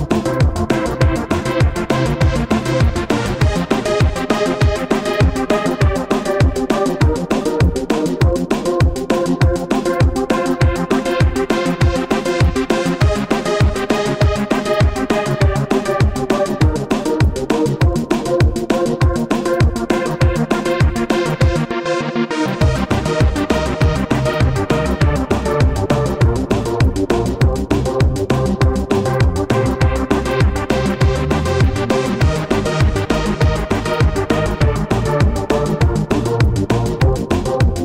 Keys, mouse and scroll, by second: 1.2 ▪, 2.1 ▪, 3.2 typing, 7.0-9.0 typing, 22.3 alt+click, 36.4 BackSpace, 36.6 BackSpace, 36.7 BackSpace.